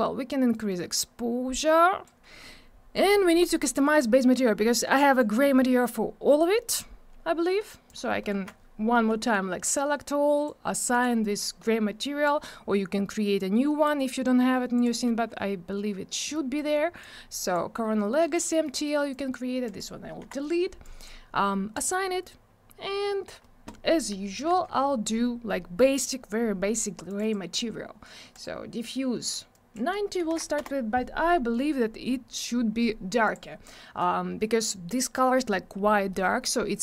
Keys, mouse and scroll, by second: 0.5 click, 3.2 middle click, 3.5 scroll down 1, 3.8 middle click, 4.1 scroll up 1, 5.2 click, 7.9 click, 8.3 ctrl+a, 9.3 click, 10.9 click, 12.0 click, 13.6 scroll down 1, 14.8 click, 16.3 middle click, 17.0 click, 18.6 middle click, 19.1 click, 19.6 click, 20.8 click, 21.7 click, 27.1 click, 27.2 click, 28.3 click, 29.5 click, 30.2 9, 30.5 Return, 33.2 click, 34.0 click.